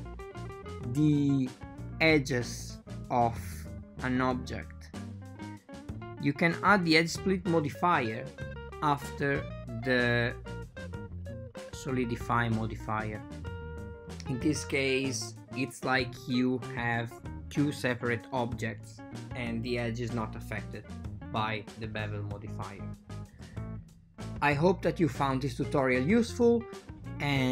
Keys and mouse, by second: 6.0 click, 11.3-12.0 drag, 14.7 right click, 15.9 click, 16.3-17.3 drag, 17.5-21.0 drag.